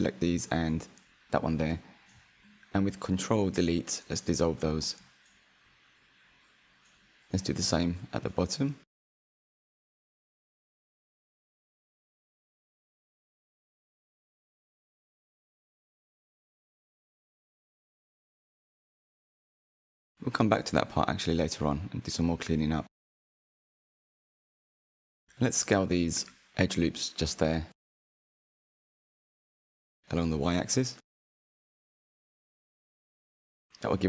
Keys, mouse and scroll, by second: 0.1 shift+click, 0.5 shift+click, 0.7 middle click, 1.7 shift+click, 2.2-4.8 middle drag, 4.8 ctrl+Delete, 6.0-8.7 middle drag, 8.7 click, 9.3-10.3 scroll up 1, 10.3 ctrl+click, 11.3 shift+click, 12.3 ctrl+click, 12.9 middle click, 13.5 scroll down 3, 13.7-16.2 middle drag, 16.2 scroll up 1, 16.3 middle click, 17.1 shift+click, 17.7 shift+click, 18.6 ctrl+Delete, 19.5 middle click, 20.1 middle click, 21.9 2, 22.2 alt+click, 22.7-24.2 middle drag, 24.6 s, 27.9 alt+shift+click, 28.4 middle click, 29.1 alt+shift+click, 29.4-30.5 middle drag, 30.5 s, 33.1 Tab.